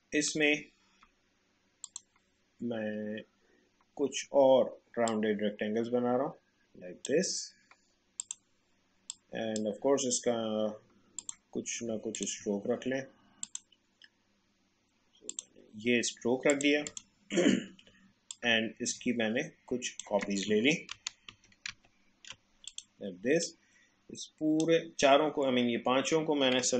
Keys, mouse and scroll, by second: 0.6 space, 1.9 click, 5.1-11.2 drag, 12.1 shift+click, 18.3-20.9 alt+drag, 20.9 ctrl+d, 22.7-26.7 drag.